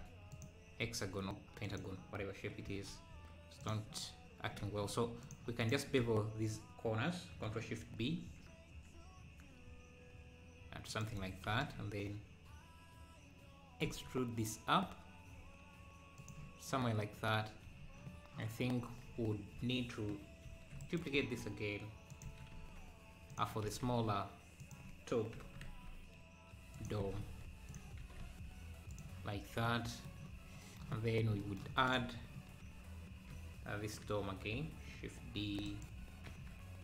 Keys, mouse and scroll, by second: 0.8 s, 2.7 s, 4.6 Tab, 5.2 click, 6.2 a, 8.0 ctrl+shift+b, 13.9 e, 17.6 Tab, 19.0 z, 20.4 shift+d, 21.1 s, 23.6 s, 27.0 g, 29.7 middle click, 29.7 s, 31.9 click, 32.2 scroll down 1, 32.4 KP_4, 33.3 KP_7, 35.4 shift+d, 36.3 shift+s.